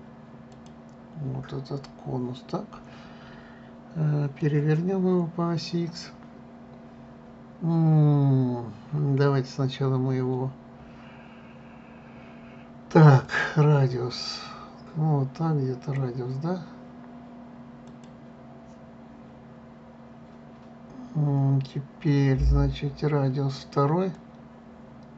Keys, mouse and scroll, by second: 2.5-7.5 middle drag, 13.9-16.9 drag, 18.6-21.6 drag, 24.8-25.1 drag.